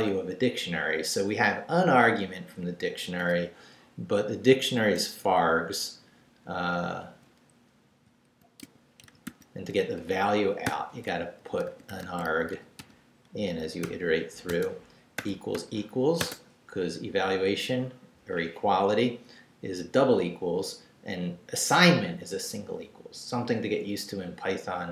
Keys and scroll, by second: 7.6-15.2 typing, 16.2 space.